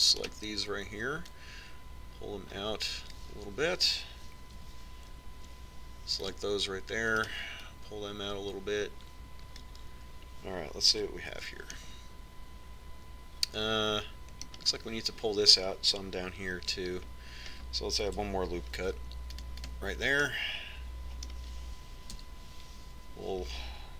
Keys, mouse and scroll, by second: 0.1 c, 1.4-2.6 right drag, 2.6 middle click, 3.6 click, 5.8 a, 6.6 c, 8.5 right click, 8.8 middle click, 10.1 click, 10.1 right click, 12.1 z, 12.6 Tab, 14.8-21.1 middle drag, 18.0 Tab, 20.1 ctrl+r, 21.5-23.5 middle drag, 23.4 z.